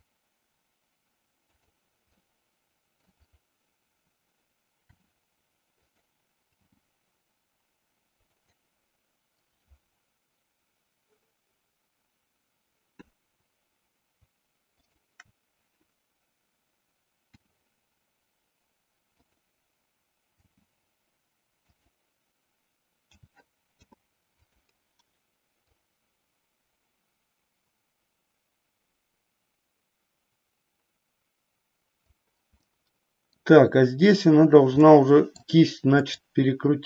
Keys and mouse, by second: 2.2 middle click, 5.0 r, 5.8 click, 6.4 g, 17.3 r, 19.3 click, 20.4 g, 21.7 click, 23.1 a, 23.6 i, 25.7-32.1 drag, 32.6 middle click, 35.0 middle click, 36.1 click.